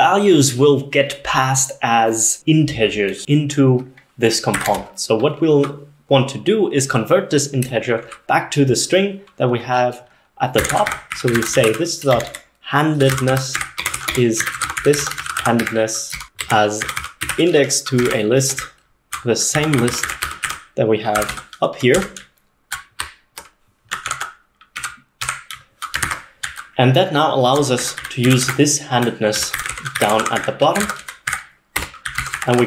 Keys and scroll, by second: 0.0-0.1 typing, 3.2 j, 4.6 o, 4.7 Return, 10.4-32.6 typing, 18.1 ctrl+alt+8, 18.1 ctrl+alt+9, 18.4 Escape.